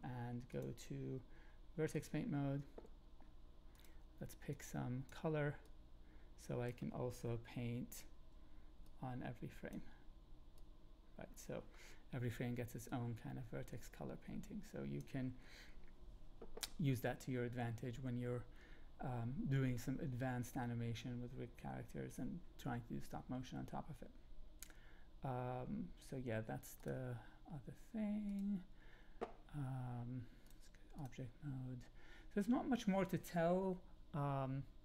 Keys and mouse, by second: 0.4-2.0 drag, 5.6-6.7 drag, 8.2 Up, 8.8 click, 10.0 Up, 10.5 click, 12.8-15.0 drag, 26.8 click, 28.2 click, 30.6-31.0 drag.